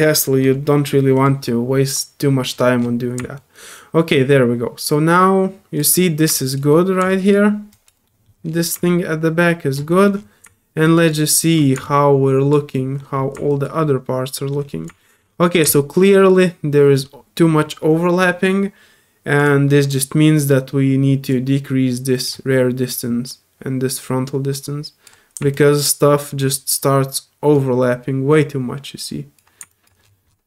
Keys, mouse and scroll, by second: 0.5 typing, 1.1 click, 2.5 middle click, 2.8 middle click, 3.3-5.8 alt+drag, 6.3 alt+click, 7.1 alt+click, 7.7 alt+click, 8.0 alt+middle click, 8.2 alt+click, 8.8 alt+click, 9.9 alt+middle click, 10.1 alt+scroll up 1, 10.9 alt+click, 11.2 alt+middle click, 11.5-12.5 alt+drag, 12.7 alt+middle click, 13.5 click, 13.8 middle click, 14.7 alt+middle click, 14.7 alt+scroll up 1, 15.0 alt+middle click, 15.7 alt+click, 19.4 click, 21.3-22.2 drag, 22.9-25.0 drag, 25.5-26.4 alt+drag, 27.5 alt+click, 29.7 click, 30.3 alt+scroll down 1.